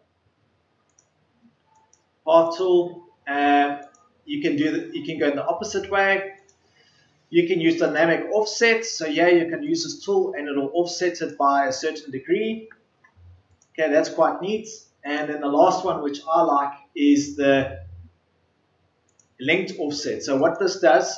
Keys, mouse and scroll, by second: 19.1 ctrl+z.